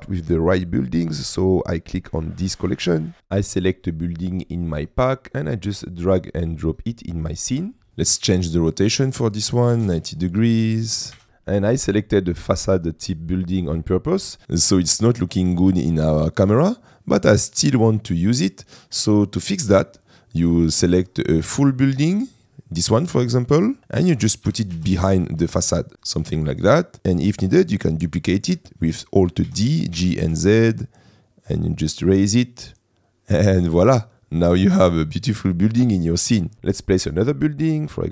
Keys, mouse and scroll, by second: 0.4 shift+middle click, 1.0 shift+middle click, 2.6 click, 7.9 ctrl+z, 8.9-10.3 drag, 11.2 g, 11.5 middle click, 13.0 middle click, 23.8 middle click, 24.5 g, 24.8 shift+z, 25.9 click, 26.0-26.5 middle drag, 27.4 middle click, 28.3 shift+middle click, 28.8 middle click, 29.6 alt+d, 30.0 g, 30.2 z, 36.9 middle click.